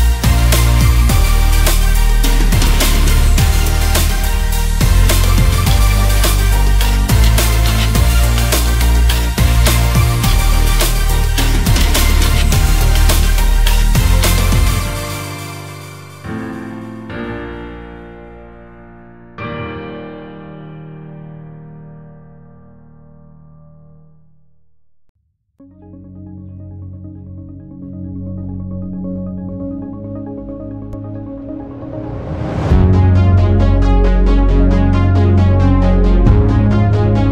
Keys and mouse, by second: 1.9 drag, 5.2 drag, 8.0 click, 9.5 click, 10.0 shift+a, 15.4 ctrl+shift+click, 17.2 ctrl+t, 17.8 click, 19.0 click, 31.3 click, 32.4-33.6 drag.